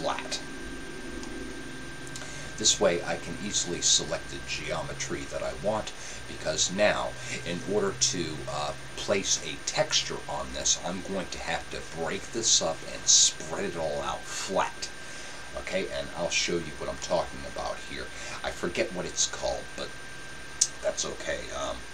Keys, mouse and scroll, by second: 0.0-1.7 drag, 1.1-3.0 middle drag, 17.0-18.8 middle drag.